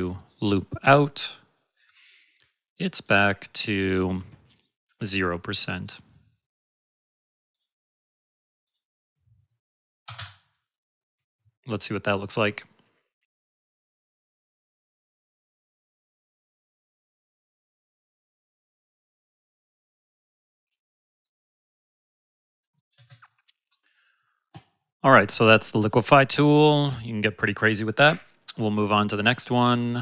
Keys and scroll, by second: 22.9 space.